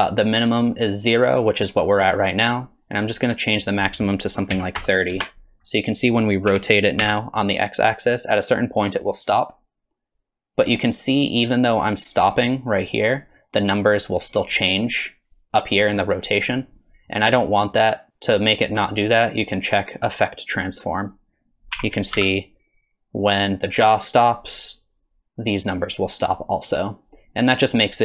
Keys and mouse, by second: 3.6-5.6 drag, 6.5 r, 20.5 click, 21.7 r.